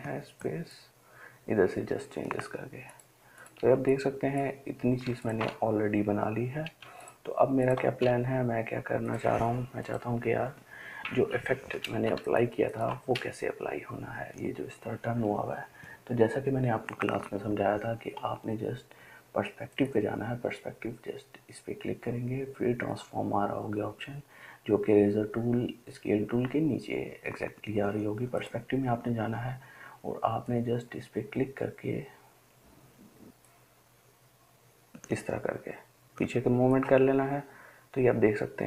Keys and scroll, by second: 7.2 ctrl+space, 7.7 ctrl+space.